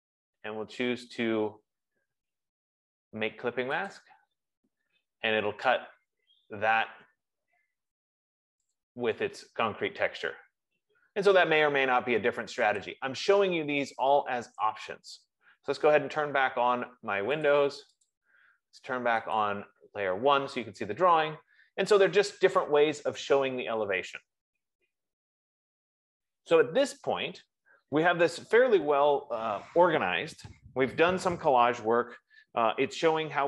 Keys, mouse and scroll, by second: 4.4 click, 9.1 click, 13.2 click, 14.9 click, 17.8 click, 18.6 click, 19.7 click, 31.4 F15.